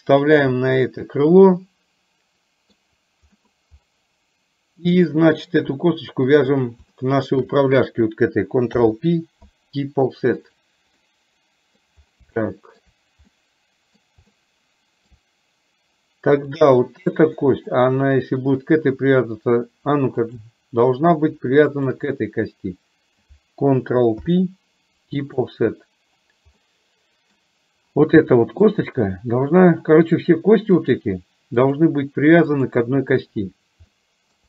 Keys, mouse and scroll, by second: 0.7-2.6 middle drag, 3.5 middle click, 5.0 middle click, 7.0 shift+middle click, 8.7 ctrl+p, 11.1 middle click, 12.6 shift+middle click, 13.3 middle click, 14.3 shift+middle click, 16.5 click, 17.5 middle click, 20.2 shift+click, 21.8 shift+click, 24.2 ctrl+p, 26.7 middle click, 28.5 middle click, 30.8 click, 31.7 click, 34.1 shift+middle click.